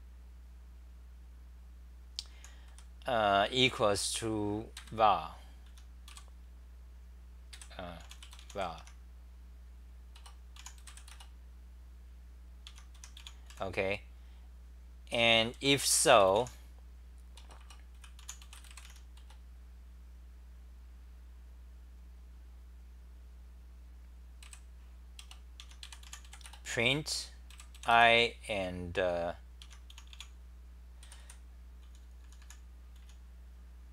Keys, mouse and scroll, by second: 2.3 h, 2.7 1, 4.7 ctrl+g, 5.7 t, 6.1 k, 7.5 f, 8.0 u, 8.8 Home, 10.2 Return, 10.6 u, 12.7-14.0 typing, 15.5 l, 17.4 Return, 17.6 Return, 17.9 c, 18.2 u, 25.2-26.5 typing, 29.6 Home, 29.9 Delete, 29.9-33.0 typing.